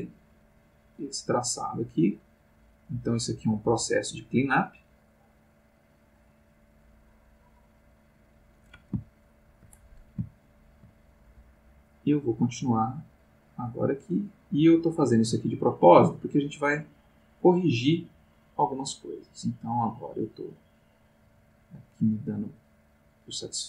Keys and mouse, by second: 9.1 shift+middle click, 10.3 shift+middle click, 11.9-23.6 drag.